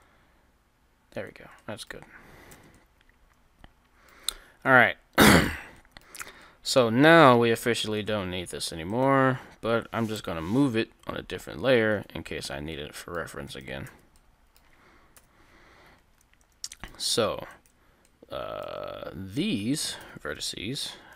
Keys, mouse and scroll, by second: 1.2 c, 1.6 middle click, 5.1-6.3 middle drag, 6.3 Tab, 7.8 KP_3, 8.9-10.4 right drag, 10.2 m, 10.6-11.9 right drag, 10.6 m, 13.9 Tab, 13.9 click, 13.9 right click, 15.1 KP_3, 16.2 middle click, 16.7 Tab, 16.7 KP_3, 17.5 KP_3, 17.6 middle click, 18.1 right click, 18.6 click, 18.6-19.9 middle drag, 18.6 right click, 20.0 KP_3.